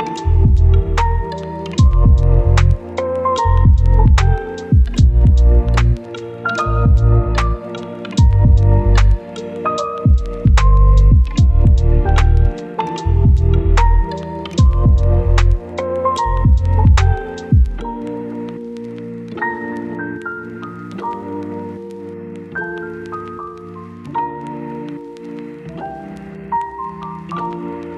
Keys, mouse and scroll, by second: 2.0 scroll down 1, 2.1-2.6 scroll up 1, 2.6 click, 2.9 right click, 3.8 click, 4.5-4.8 scroll down 1, 5.0 click, 5.2 right click, 5.5 scroll down 1, 5.7 right click, 6.1 scroll up 1, 6.3 right click, 6.7 scroll up 1, 6.8 right click, 7.3-8.0 scroll up 1, 8.0-11.4 drag, 11.4 right click, 12.1 click, 13.0 right click, 13.7 click, 14.7 scroll down 1, 14.8 right click, 15.6 click, 15.9 scroll down 1, 16.0-16.8 scroll up 1, 16.8 right click, 17.4-17.8 scroll up 1, 20.0 click, 24.6 scroll down 1, 24.7 scroll up 1, 25.6 scroll down 1, 25.7 scroll up 1, 26.5 scroll down 1, 26.6-27.3 scroll up 1, 27.3 right click, 27.6 scroll up 1.